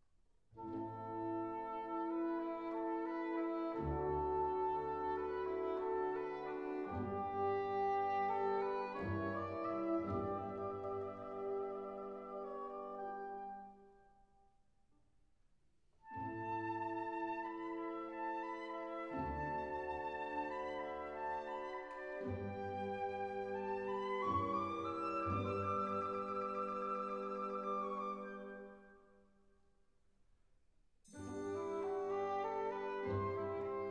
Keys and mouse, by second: 1.4 click, 1.6 Tab, 8.4 s, 8.6 z, 9.2 KP_1, 9.6 KP_Enter, 11.4 ctrl+a, 13.3 Tab, 14.7 3, 15.1 click, 17.0 i, 17.9 click, 19.1-21.4 drag, 22.4 g, 22.5 z, 23.0 click, 24.3-25.8 drag, 28.4 e, 29.6 click, 30.7-32.1 drag, 33.8 i.